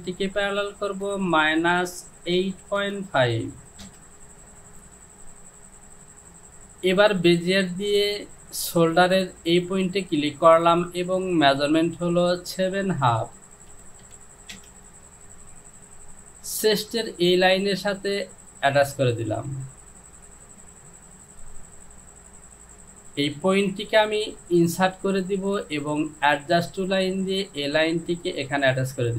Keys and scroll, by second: 1.5 KP_Subtract, 2.5 KP_8, 2.8 KP_Decimal, 3.3 KP_5, 3.9 Return, 13.4 KP_7, 13.8 KP_Decimal, 14.1 KP_5, 14.6 Return.